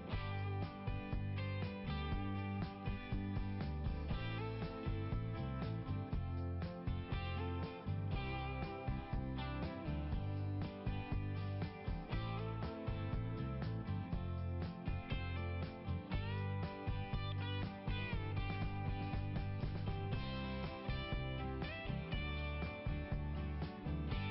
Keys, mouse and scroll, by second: 7.2 click, 8.5 click, 8.9 click, 13.8 scroll down 1, 16.2 scroll up 1, 21.7 scroll up 1.